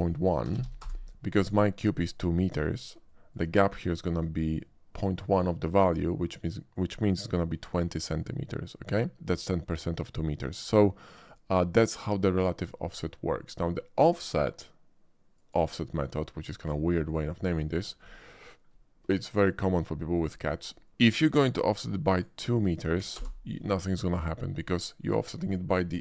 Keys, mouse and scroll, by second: 0.5 1, 0.6 1, 0.8 Return, 3.0-3.3 shift+middle drag, 3.9 shift+middle drag, 7.3 middle click, 11.3 shift+middle click, 15.4 click, 17.8 shift+middle click, 18.0-18.6 shift+middle drag, 19.4 shift+middle click, 22.0 click, 23.1 2, 23.1 Return.